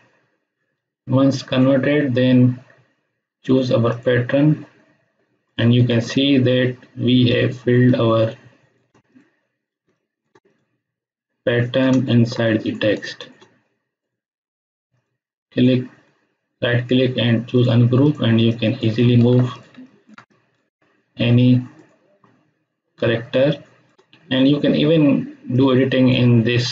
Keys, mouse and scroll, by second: 3.9 click, 5.8 space, 6.1-7.0 ctrl+drag, 9.7 space, 9.9 ctrl+click, 10.5 click, 11.9 ctrl+space, 12.0 ctrl+click, 14.9 right click, 17.5 click, 19.2 ctrl+z, 19.5 click, 19.6 space, 19.8 ctrl+click, 23.1 space, 23.5-24.1 ctrl+drag.